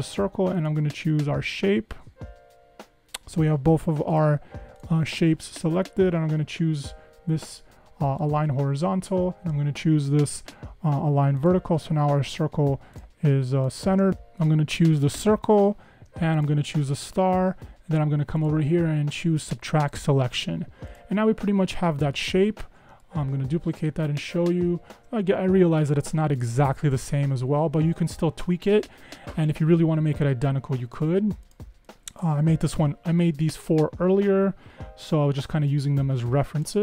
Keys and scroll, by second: 14.1 super+z.